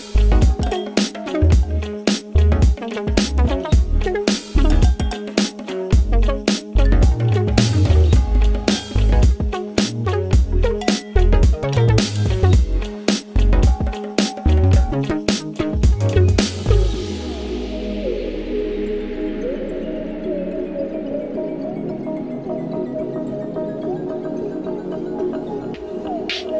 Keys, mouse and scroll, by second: 1.1 click, 5.8-7.3 typing, 8.4 click, 13.4-16.5 drag, 17.6 p, 21.1-26.5 drag.